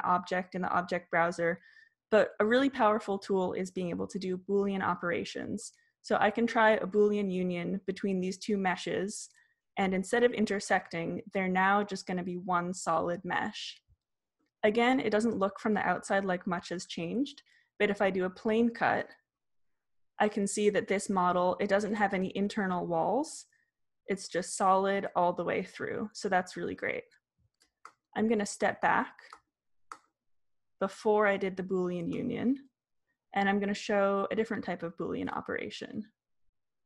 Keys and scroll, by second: 28.4 super+z, 30.4 super+z, 32.4 super+z.